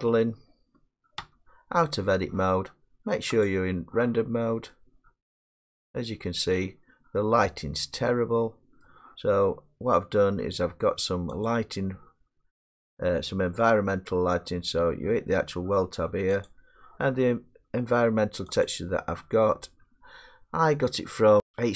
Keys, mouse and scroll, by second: 1.0 middle click, 1.2 Tab, 2.3 middle click, 3.5 click, 4.3 middle click, 8.8 middle click, 11.5 click, 16.5 click, 18.7 click.